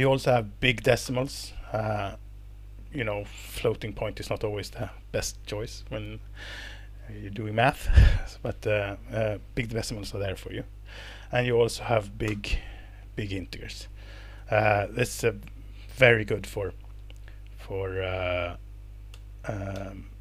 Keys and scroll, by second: 1.0 alt+Return, 2.5 Escape, 11.3 Page_Down, 11.5 Page_Down, 12.2 alt+Return, 14.3 Escape, 17.0 Down, 17.2 Down, 19.1 Down, 19.7 Down.